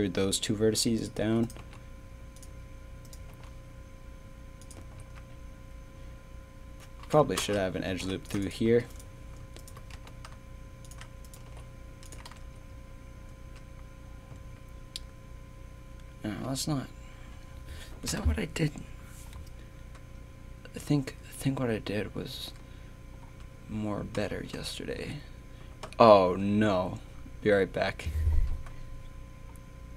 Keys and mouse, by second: 1.2 z, 1.6 g, 3.3 g, 4.8 z, 5.0 a, 7.9 ctrl+r, 8.4 click, 8.7 z, 8.9-9.9 right drag, 9.9 g, 11.5 g, 12.2 Tab, 12.3 z, 13.3 Tab, 14.3 a, 16.4 middle click, 16.5 middle click, 17.3-22.0 middle drag, 23.2 Tab, 24.5 ctrl+z, 25.0 ctrl+z.